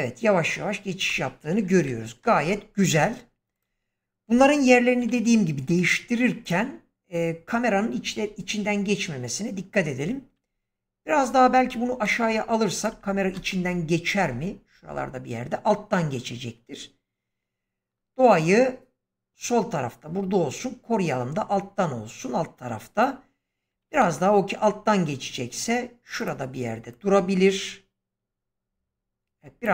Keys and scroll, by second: 1.0 space, 1.8 shift+Left, 11.3 g, 13.2 ctrl+space, 23.8 g.